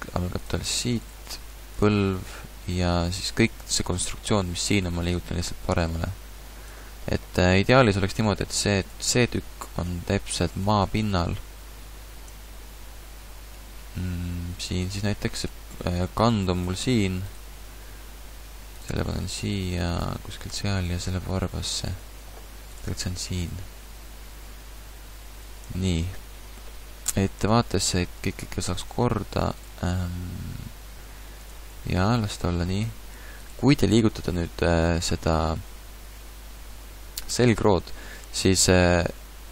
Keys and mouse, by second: 1.2 g, 2.4 a, 2.9 a, 3.2 b, 7.8 KP_Decimal, 8.8-10.6 drag, 10.6 KP_1, 11.2 KP_3, 13.5 g, 15.4 right click, 15.5 g, 17.2 click, 17.7 g, 19.6 g, 20.9 g, 22.4 click, 24.4 g, 24.5-25.7 middle drag, 27.1 KP_1, 29.7 g.